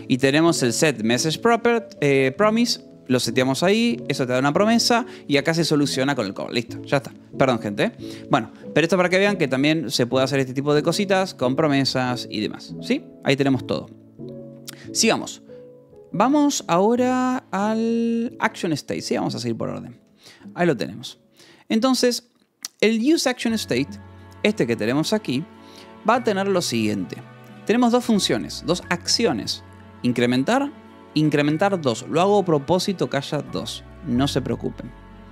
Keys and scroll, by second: 0.0-2.0 typing, 2.4 Escape, 3.9 j, 5.9 Escape, 6.2 j, 7.7 k, 8.4 k, 9.8-11.5 typing, 13.6-15.6 typing, 17.8 k, 18.4 Return, 18.9 j, 19.8 k, 22.3 j, 23.7 k, 24.6 j, 27.0 j, 27.5 j, 29.6 Escape, 30.2 j, 30.7 j, 31.8 Escape.